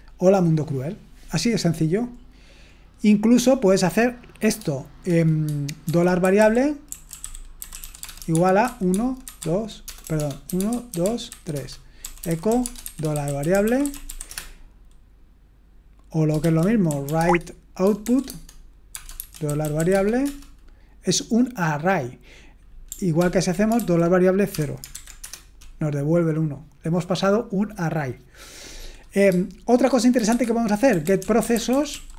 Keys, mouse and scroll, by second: 2.2-2.7 scroll down 1, 2.7-3.3 scroll down 1, 3.3 click, 5.6-14.5 typing, 16.2-20.3 typing, 18.3 Tab, 23.2 ctrl+p, 23.8-25.4 typing, 30.1-32.1 typing.